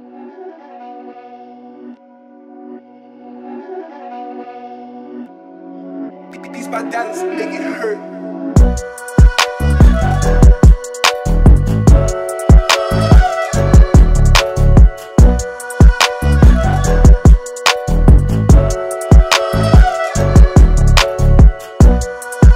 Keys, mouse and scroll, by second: 2.6-8.3 drag, 14.4 alt+scroll down 1, 15.7 space, 15.8 click, 16.7-17.0 alt+scroll down 1, 17.0 click, 17.5 space, 18.4 alt+scroll up 1, 18.9 space, 19.0 click, 22.1 click.